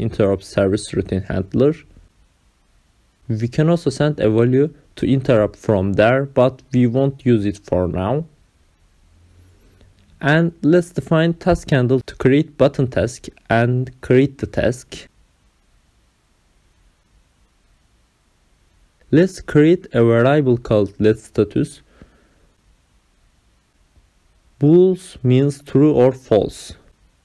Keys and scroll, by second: 7.9 Return, 8.1 Up, 8.1-11.0 typing, 11.5 ctrl+v, 15.6 ctrl+c, 16.4 Return, 16.8 Up, 17.2 Return, 17.6 ctrl+v, 18.6 ctrl+alt+0, 18.9 Left, 19.1 Return, 19.6 Up, 19.9-27.1 typing, 24.3 Return.